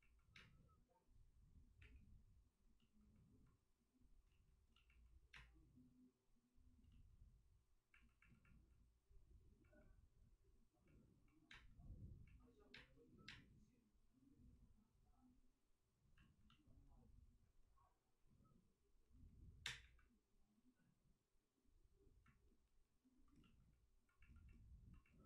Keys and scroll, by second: 1.3 space, 1.7 3, 3.5 space, 4.2 ctrl+z, 4.2 3, 5.3 space, 11.5 space, 12.7 space, 13.2 space, 19.6 space, 19.8 1.